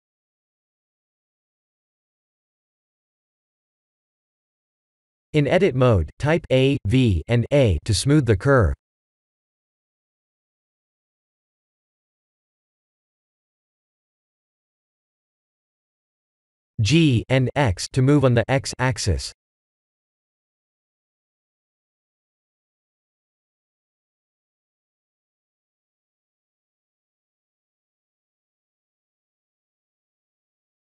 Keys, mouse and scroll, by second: 0.4 e, 1.0 e, 3.0 Tab, 3.4 a, 3.7 Tab, 4.3 click, 4.7 Tab, 5.1 click, 5.7 Tab, 6.1 a, 6.3 v, 6.7 Tab, 7.7 click, 9.6 click, 10.3 click, 13.3 click, 16.3 g, 21.5 middle click, 22.6 middle click, 23.9 click, 24.5 Tab, 25.1 click, 25.9 KP_1, 26.2 KP_3, 26.5 KP_1, 27.6 r, 28.8 g.